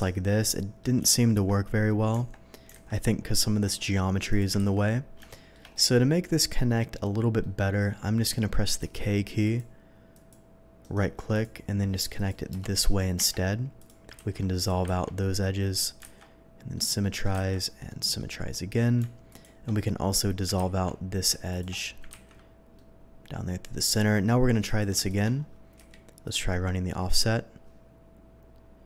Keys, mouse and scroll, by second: 0.4-0.8 ctrl+scroll up 1, 1.0 ctrl+z, 2.1 Tab, 2.8 alt+a, 4.3 click, 4.6 ctrl+x, 5.3 shift+middle click, 5.7-7.1 middle drag, 7.4 middle click, 8.8 k, 9.4 click, 10.1 click, 10.8 right click, 11.3 click, 12.1 click, 12.5 Return, 13.1 Tab, 13.8 click, 14.1 ctrl+x, 14.6 click, 15.0 ctrl+x, 16.0 alt+x, 16.7 middle click, 17.8 alt+x, 17.8 middle click, 19.3 click, 20.5 x, 21.5 click, 22.1 x, 22.4-23.9 middle drag, 23.1 ctrl+x, 24.6 click, 25.0 click, 26.0 y, 26.2 click.